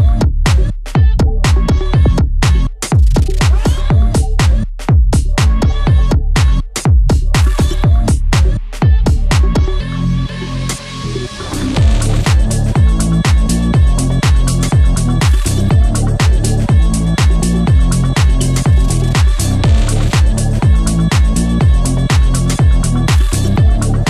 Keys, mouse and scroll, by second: 0.4 click, 4.4 Tab, 6.1 click, 6.7 shift+click, 7.3 b, 7.9 click, 8.6 shift+click, 9.2 l, 10.8 scroll up 1, 15.6 click, 17.2 t, 17.8 click, 19.1 l, 20.6 scroll down 1, 22.0 click, 22.7 click, 23.1 right click, 23.7 click.